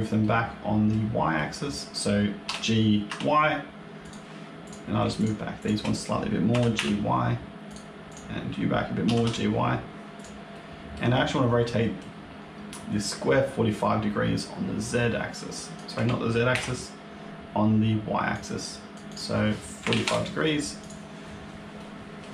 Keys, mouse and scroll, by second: 0.1 middle click, 1.2 middle click, 2.3 g, 4.5 click, 5.1 shift+click, 5.5 click, 6.4 g, 8.0 click, 8.9 g, 10.4 middle click, 11.5 middle click, 14.3 click, 16.5 ctrl+z, 18.2 click, 19.0 click, 20.7 click, 21.3-21.9 scroll up 2, 21.7 middle click.